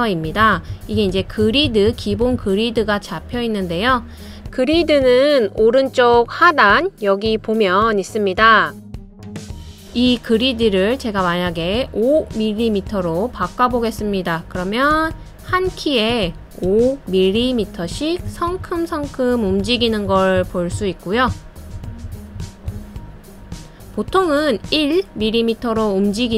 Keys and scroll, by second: 1.3 Up, 1.6 Up, 1.9 Up, 2.1 Up, 2.4 Up, 2.6 Up, 15.9 Left, 16.5 Left, 17.1 Left, 17.7 Left, 18.4 Down, 18.9 Down, 19.3 Down, 19.6 Down, 20.5 Up, 20.8 Up, 21.1 Up, 21.4 Up, 21.8 Up, 22.3 Up, 22.8 Right, 23.1 Right, 23.4 Right, 23.7 Right.